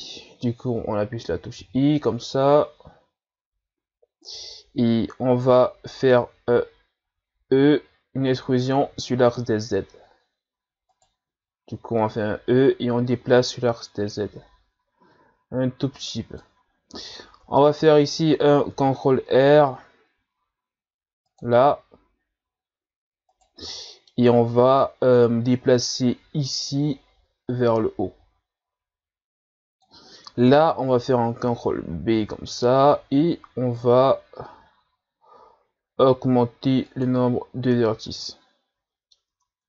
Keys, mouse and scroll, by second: 7.6 e, 12.0-15.0 drag, 16.7-17.2 scroll down 1, 17.2-17.6 scroll down 2, 17.6-18.7 middle drag, 18.7 ctrl+r, 23.7 middle click, 24.3-25.5 scroll up 1, 25.5-28.5 drag, 31.4 ctrl+b, 38.1-39.3 middle drag, 39.3 Tab.